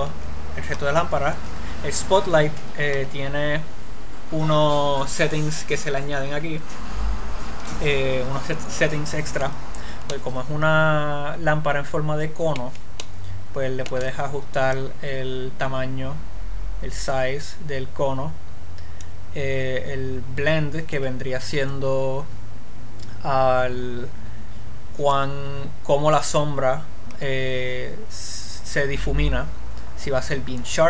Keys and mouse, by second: 10.5-12.0 middle drag, 15.1-16.4 middle drag.